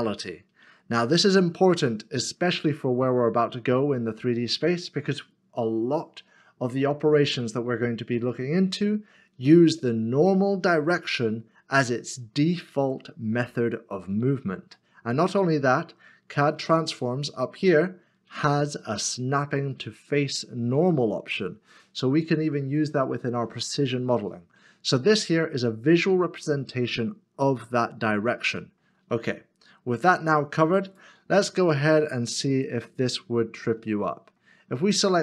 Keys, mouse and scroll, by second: 23.6 middle click, 33.9 middle click.